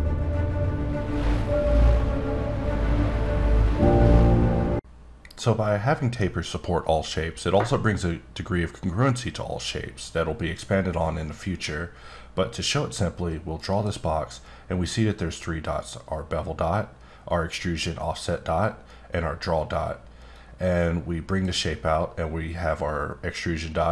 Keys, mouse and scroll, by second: 9.3-11.3 scroll up 3, 11.6 click, 13.6 right click, 20.3 click.